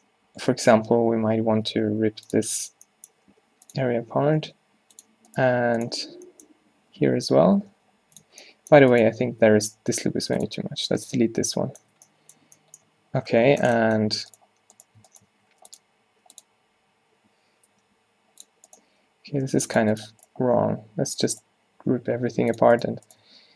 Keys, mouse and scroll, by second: 1.8 v, 2.6 z, 3.4 g, 4.5 v, 5.4 click, 6.0 z, 7.7 v, 8.3 z, 9.3 x, 10.8 Tab, 12.0 Tab, 12.6 Tab, 12.9 Tab, 13.6 a, 15.4 w, 16.5 click, 17.8 v, 18.9 v, 20.5 v, 22.2 g, 23.3 w.